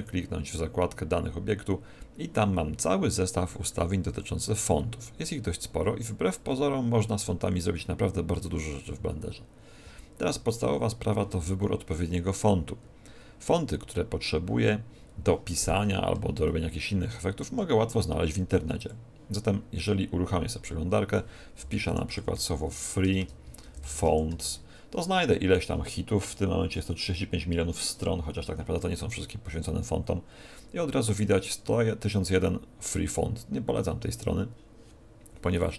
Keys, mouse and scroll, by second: 3.3-4.0 scroll down 8, 4.0-4.3 scroll up 7, 16.4 shift+middle click.